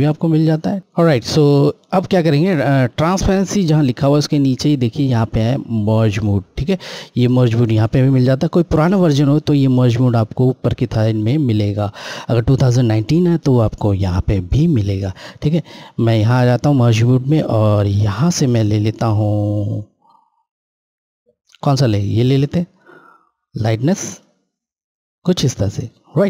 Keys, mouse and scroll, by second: 16.2 Left, 16.2 click, 24.0 click.